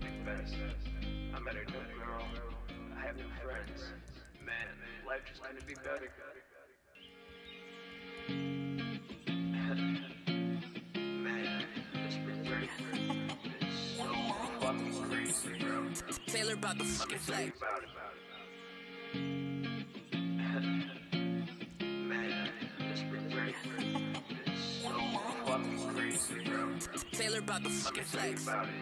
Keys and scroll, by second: 0.0 ctrl+shift+-, 0.3 super+s, 4.0 ctrl+shift+Up, 4.4 ctrl+shift+Up, 5.6 Return, 5.6 space, 5.9 super+s, 7.9 super+Tab, 14.3 super+Tab, 16.8 Return, 16.9 space, 27.0 ctrl+shift+Up, 27.8 super+s.